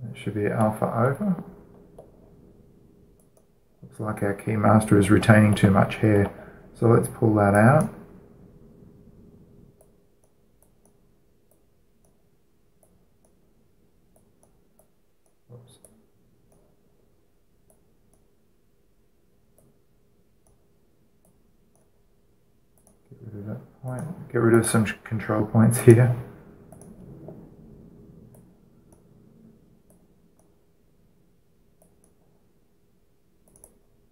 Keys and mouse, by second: 3.9-5.7 right drag, 5.9-8.3 middle drag, 8.3-10.3 drag, 10.5-34.1 drag.